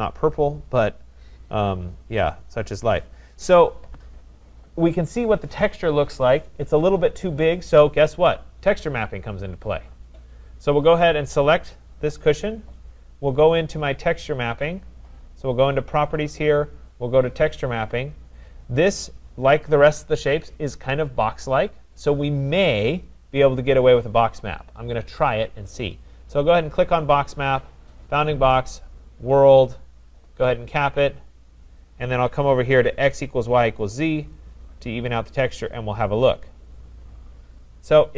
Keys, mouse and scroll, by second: 1.2 scroll, 1.8-2.2 scroll, 3.1 scroll down 1, 3.3 scroll down 1, 9.8 scroll down 2, 11.8 click, 14.2 middle click, 15.9 click, 16.2 click, 17.5 click, 25.9 click, 28.1 click, 29.4 click, 30.5 click, 33.8 click, 35.1 click, 36.2 scroll, 36.8 scroll, 37.6 scroll.